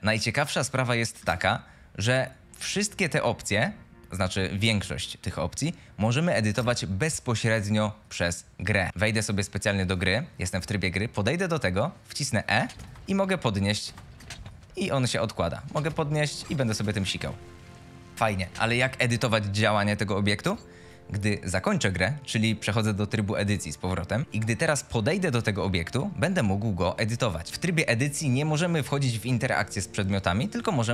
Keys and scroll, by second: 1.3 Escape, 10.0-17.2 typing, 18.4 s, 20.3 Escape, 27.0-27.7 typing.